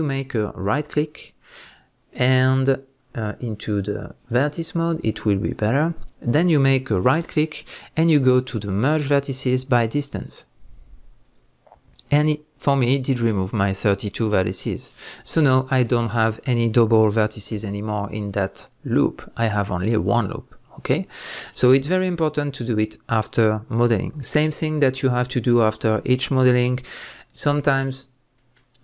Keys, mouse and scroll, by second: 0.6 right click, 4.2 click, 5.6-16.2 right drag, 15.1 scroll up 1, 16.2 click, 17.5 g, 20.9 right click, 21.9 scroll down 1, 28.3-28.8 middle drag.